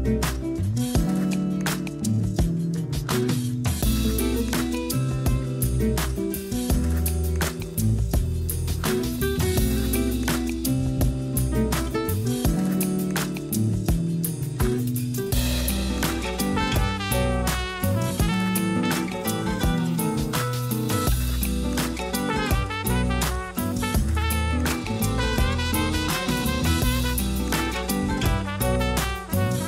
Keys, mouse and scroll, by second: 0.0 scroll down 1, 0.8 shift+middle click, 1.7-2.2 scroll up 5, 2.2 g, 3.5-4.2 scroll down 8, 4.2-5.7 typing, 5.0 scroll down 1, 5.2 Tab, 6.4-6.9 shift+middle drag, 6.9-7.4 scroll down 2, 7.4-10.5 shift+middle drag, 12.3 click, 13.7 s, 15.7-16.0 scroll up 8, 16.2 g, 17.4-18.0 scroll down 8, 18.0 a, 18.1 a, 19.1-22.2 shift+middle drag, 23.6-24.4 shift+middle drag, 24.4 click, 24.8 Tab, 25.2 a, 25.4 a, 25.7 z, 25.9 b, 28.1 g.